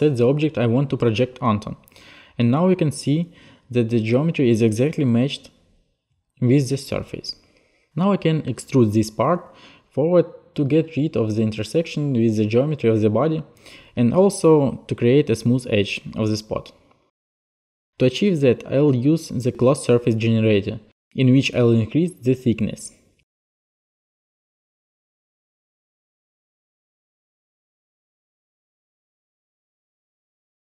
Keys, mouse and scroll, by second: 4.5 click, 7.7 alt+click, 11.5 alt+click, 13.0 alt+click, 13.5 click, 14.1 middle click, 14.8 middle click, 16.2 middle click, 16.9 middle click, 22.4 alt+click, 24.2 click, 25.0 click, 25.8 click, 26.0 click, 26.2 click, 26.5 click, 27.2 alt+click, 28.4 click, 28.5 click, 29.1 click, 30.3 alt+click.